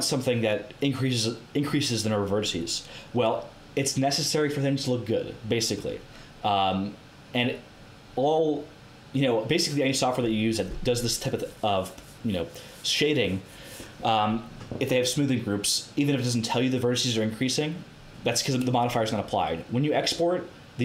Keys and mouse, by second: 3.0-7.6 middle drag.